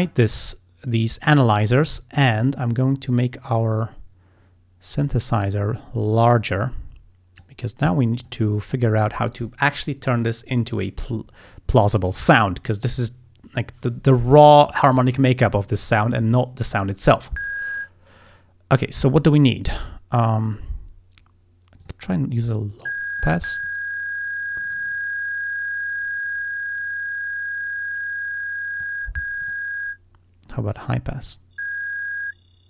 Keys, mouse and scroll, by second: 0.0 click, 1.4 click, 2.5 click, 2.8 click, 3.8 click, 5.1 click, 6.1-7.7 drag, 8.3 click, 20.5 click, 21.9 click, 22.8 click, 23.7-29.0 drag, 29.4 click, 30.7 click, 31.3-32.6 drag.